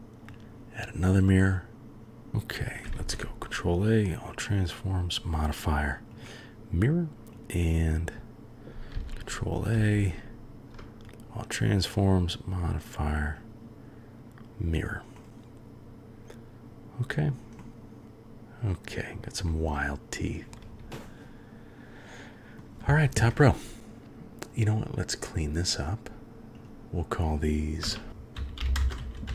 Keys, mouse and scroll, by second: 3.0 ctrl+a, 4.9-6.2 drag, 7.3 click, 8.9 ctrl+a, 9.9 ctrl+a, 11.9-13.5 drag, 15.1-16.7 middle drag, 16.7-17.3 drag, 17.6-19.1 drag, 19.6-21.3 drag, 21.3-22.6 middle drag, 26.5 click, 28.0 shift+click, 28.6-29.3 shift+drag.